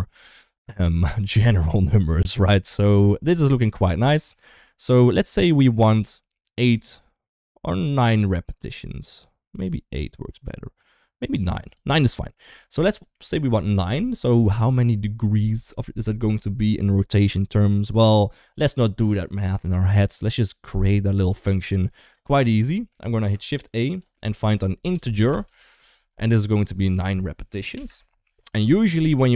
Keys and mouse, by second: 0.1 shift+middle click, 0.8 shift+middle click, 3.4 middle click, 4.2 shift+middle click, 4.7 shift+middle click, 5.7 click, 7.7 click, 9.3 click, 11.5 click, 12.8 shift+middle click, 21.1 click, 21.3 click, 21.9 click, 22.2 shift+middle click, 22.8 shift+a, 26.7-27.7 drag.